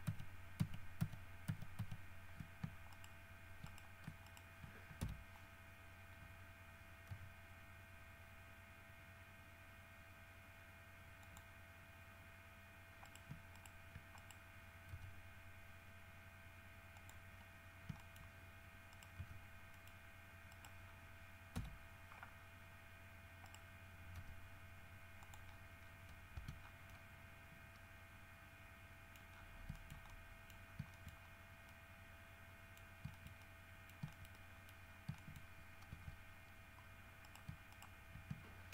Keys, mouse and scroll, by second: 3.1 shift+middle click, 3.9 shift+middle click, 4.5 shift+middle click, 5.2 shift+KP_3, 7.3 g, 11.5 click, 12.3 scroll up 1, 12.6 scroll down 1, 13.3 shift+right click, 13.8 shift+right click, 14.4 shift+right click, 15.1 g, 17.2 click, 17.7-18.1 scroll up 4, 18.1 shift+middle click, 18.2 shift+middle click, 19.1 right click, 19.4 g, 19.7 click, 19.9 middle click, 20.7 right click, 21.1 scroll down 1, 21.8 KP_3, 22.6-23.2 scroll up 4, 23.7 right click, 24.4 g, 25.4 click, 25.7-26.3 scroll down 4, 26.6 Tab, 26.8 scroll down 2, 27.1-29.4 middle drag, 29.4 scroll up 1, 29.5 scroll down 1, 30.1 shift+middle click, 30.9 scroll down 2, 31.2 shift+middle click, 31.5 shift+scroll down 2, 31.9 middle click, 33.0 scroll up 1, 33.0 middle click, 33.4 shift+middle click, 34.3 shift+scroll up 1, 34.5 shift+middle click, 35.2 shift+scroll up 2, 35.5 shift+middle click, 36.2 Tab, 36.5 scroll up 2, 37.4 shift+right click, 37.9 shift+right click.